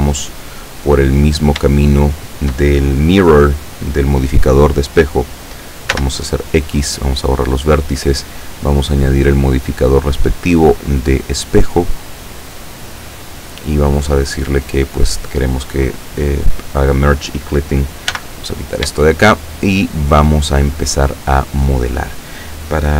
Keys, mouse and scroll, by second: 0.1 click, 0.5 click, 1.5 shift+right click, 2.3 shift+right click, 6.0 x, 7.0 click, 9.6 click, 10.3 click, 12.0 click, 14.7 click, 18.2 n, 19.2-20.4 shift+middle drag.